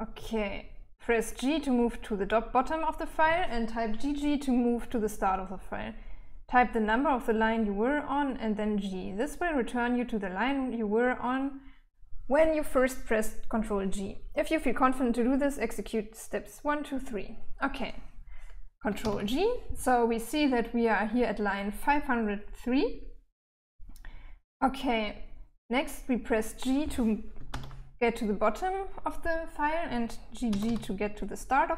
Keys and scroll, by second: 18.4 ctrl+g, 26.9 shift+g, 29.9 typing.